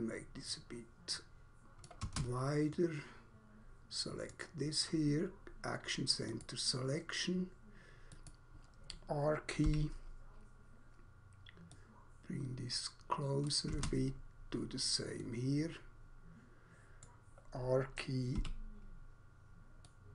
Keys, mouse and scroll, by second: 1.8 click, 2.0 space, 2.8 middle click, 4.3 middle click, 6.3 click, 8.1 click, 9.6 r, 11.8 click, 13.5 click, 13.8 space, 15.1 middle click, 17.0 middle click, 18.3 r, 19.8 click.